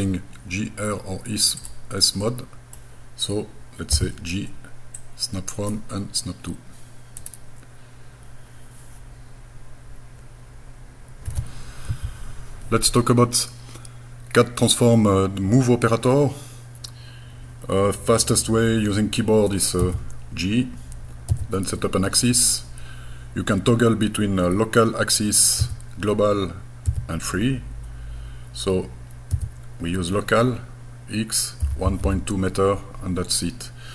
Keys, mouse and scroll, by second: 1.6 click, 2.2 middle click, 3.9 g, 5.0 click, 7.2 right click, 19.8 g, 25.6 x, 26.9 x, 29.4 x, 31.7 KP_1, 31.9 KP_Decimal, 32.0 KP_2.